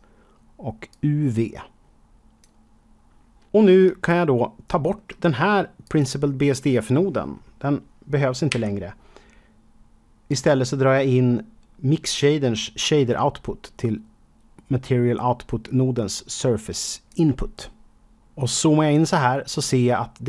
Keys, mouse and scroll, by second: 0.8 click, 4.0 shift+middle click, 4.0 shift+middle click, 5.8 click, 8.4 Delete, 10.2 click, 18.1 middle click, 18.4 KP_Decimal, 20.0 middle click.